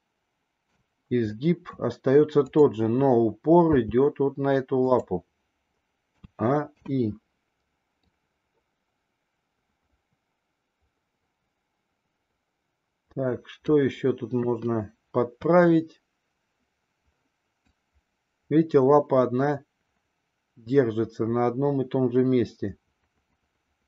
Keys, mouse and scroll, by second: 0.8 scroll down 1, 1.2 scroll up 1, 1.4 middle click, 2.4 click, 3.6 g, 6.1 a, 6.6 i, 8.0-13.7 drag, 14.3 KP_3, 15.3 KP_3, 17.6-23.8 drag.